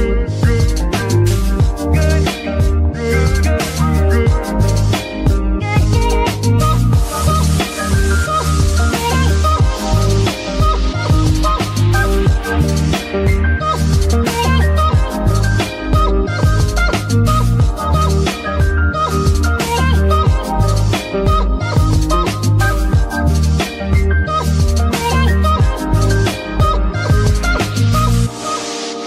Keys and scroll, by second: 9.7 F2, 11.4-12.3 typing, 12.6 Return, 26.2 a, 26.6 r, 26.6 m, 28.1 shift+BackSpace.